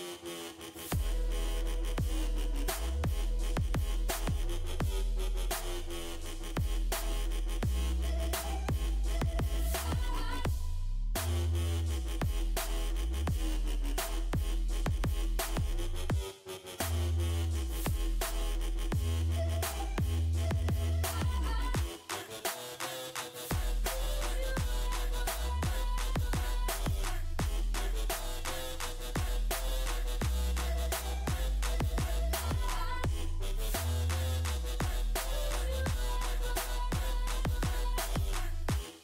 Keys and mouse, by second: 0.6-2.1 right drag, 6.5-9.7 right drag, 11.7 z, 12.8 z, 16.0 z, 16.3 z, 16.6 Tab, 17.9 Tab, 18.3 Tab, 19.5 ctrl+r, 21.0 Tab, 21.4 Tab, 22.6 Tab, 24.7-27.7 drag, 30.1 KP_5.